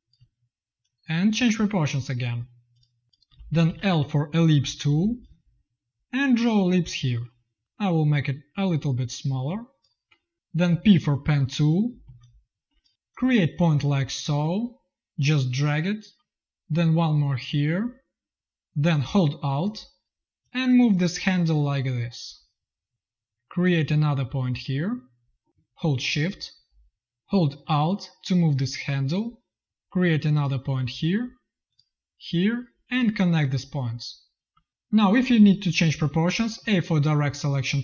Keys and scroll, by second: 0.1 v, 3.2 v, 3.5 l, 7.5 v, 10.6 p, 11.9 z, 22.9 space, 34.4 v, 36.5 a.